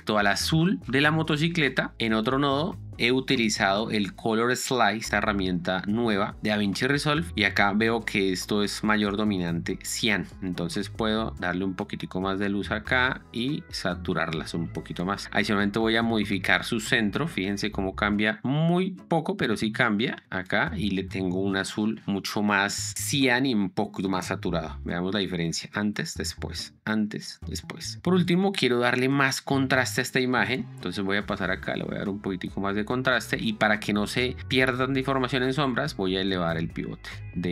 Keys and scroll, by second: 25.3 ctrl+d.